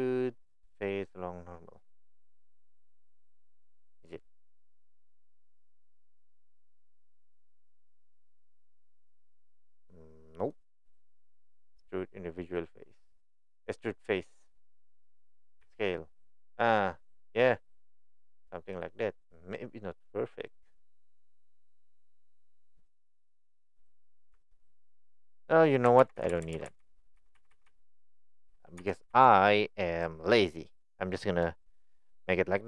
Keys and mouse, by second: 6.2-10.5 right drag, 10.9-23.4 right drag, 23.8 click, 24.3 Tab, 24.8 middle click, 26.0 ctrl+z, 26.2 ctrl+z, 27.3-30.0 ctrl+z.